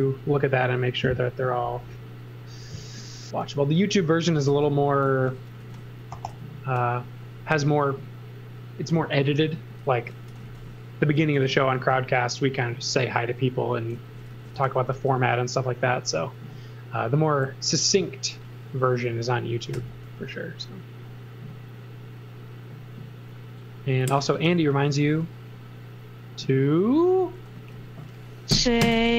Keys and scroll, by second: 2.6 m, 4.5 e, 5.0 z, 5.6 x, 6.3 b, 9.5-11.7 typing, 13.7-15.0 typing, 19.7 l, 24.3 space, 28.8 super+a.